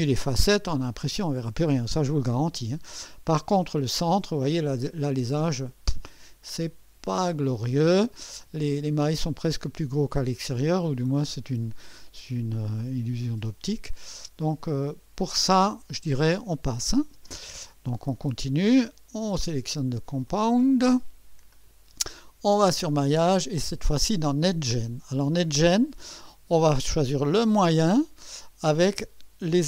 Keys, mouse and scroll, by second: 4.6 click, 6.4-8.3 drag, 12.8-14.3 drag, 16.6 click, 17.1 space, 19.3 click, 20.3 click, 21.5 click, 22.6 click, 24.4 click, 29.5 click.